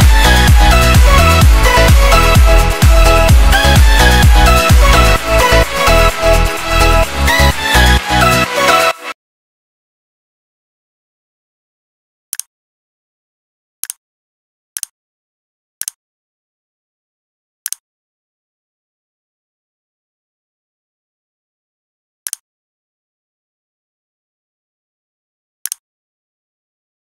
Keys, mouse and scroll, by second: 3.3 c, 3.3 click, 6.2 click, 7.7 click.